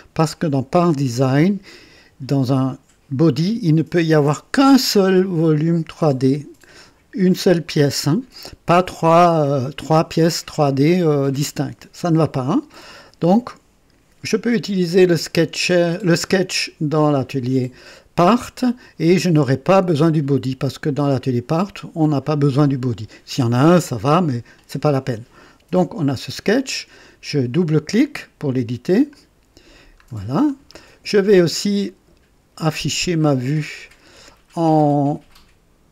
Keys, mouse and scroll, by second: 28.9 click, 30.0-30.4 scroll down 2, 30.9 right click, 34.5 click.